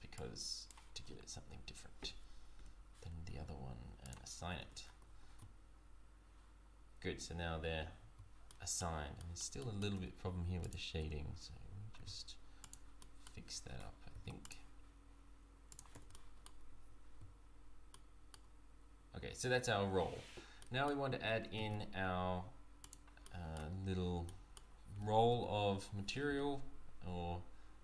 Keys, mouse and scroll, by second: 2.6 l, 4.0 click, 4.6 Tab, 4.8 scroll down 3, 5.0 z, 7.8 z, 8.5 middle click, 9.2 middle click, 9.6 shift+middle click, 9.9 Tab, 10.6 alt+click, 11.9 s, 13.0 middle click, 14.1 ctrl+r, 15.9 Tab, 16.1 middle click, 16.7 z, 16.8 z, 18.0 middle click, 19.5 z, 20.2-20.6 scroll down 2, 20.6 middle click, 21.5 shift+a, 23.2 middle click, 24.2 middle click, 24.9 g.